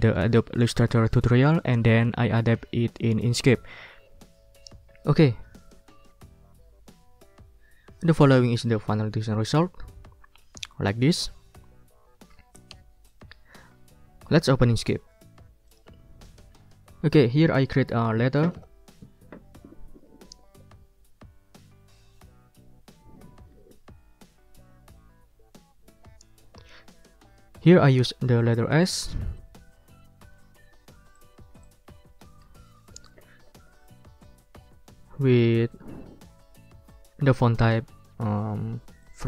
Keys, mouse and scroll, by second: 8.6 click, 13.0 click, 15.7 click, 29.3-30.5 scroll up 4, 31.1 click, 31.6 click, 32.5 shift+s, 33.0 ctrl+a, 39.0 ctrl+click.